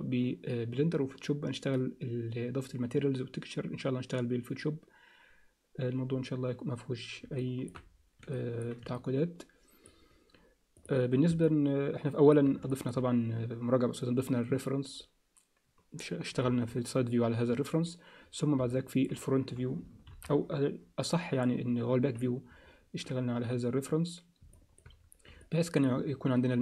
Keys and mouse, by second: 7.4 alt+shift+middle click, 8.3 alt+shift+middle click, 8.9 alt+middle click, 10.8 click, 11.4 alt+middle click, 12.7 alt+shift+middle click, 16.4 KP_3, 18.7 alt+middle click, 20.1 ctrl+KP_1, 22.0 z, 24.5 alt+shift+middle click, 25.4 alt+middle click.